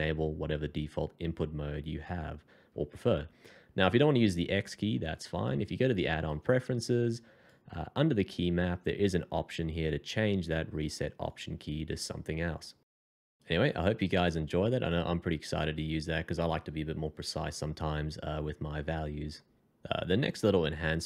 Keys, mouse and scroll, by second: 3.9 Escape, 8.0 scroll down 1, 14.8 middle click.